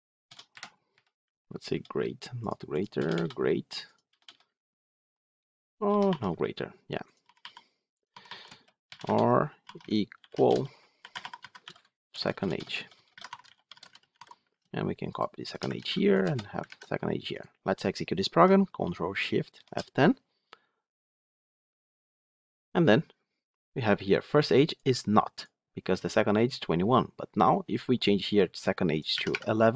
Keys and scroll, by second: 15.7 ctrl+c, 16.5 ctrl+v, 19.4 ctrl+shift+F10.